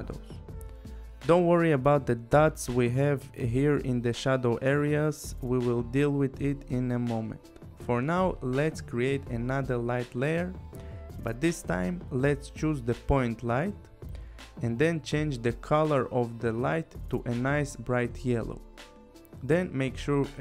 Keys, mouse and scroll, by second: 1.5-1.9 scroll, 1.9 click, 2.3 click, 2.3 scroll, 2.7 click, 3.0 click, 3.7 click, 5.2 click, 6.6 click, 9.0 right click, 11.5 click, 12.6 click, 13.4 click, 14.6 click, 15.9 click, 18.2 click.